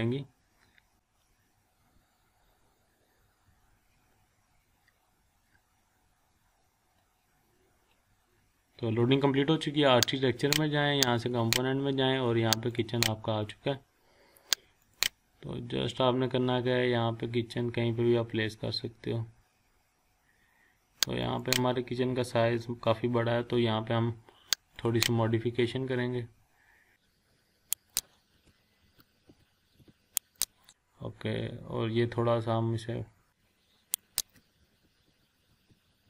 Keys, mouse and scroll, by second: 10.6 click, 21.2 click, 23.1 scroll up 1, 24.7 click, 25.2-25.6 scroll down 1, 26.1 scroll up 1, 26.4-26.7 scroll down 1, 27.0 scroll up 1, 27.9 click, 28.4 Down, 29.8 Up, 30.3 click, 30.6 scroll up 1, 31.4 scroll down 1, 34.0-34.4 click, 34.8 Down, 35.5 Up, 35.7 Down.